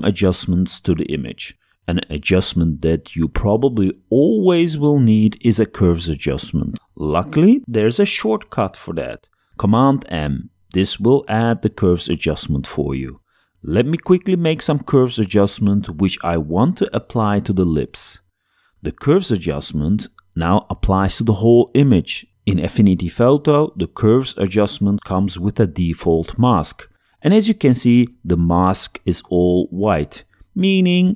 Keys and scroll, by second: 9.4 super+m.